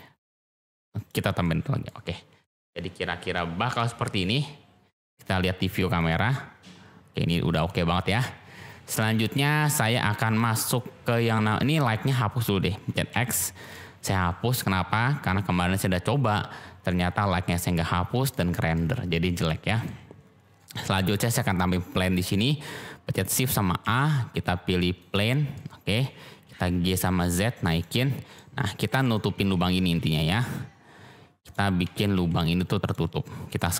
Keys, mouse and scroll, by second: 1.4-1.8 middle drag, 5.9 click, 9.4-9.9 middle drag, 10.2 click, 11.6 click, 13.2 x, 14.1-14.5 middle drag, 16.9-18.3 middle drag, 18.7-19.6 middle drag, 19.9-20.5 middle drag, 20.9 click, 23.8 shift+a, 25.5-26.0 middle drag, 26.7 g, 26.8 z, 27.6 click, 28.3-29.0 drag, 29.2 g, 29.4 z, 29.9 x, 31.4 click, 31.8 g, 32.1 y, 32.8 click, 33.5 s.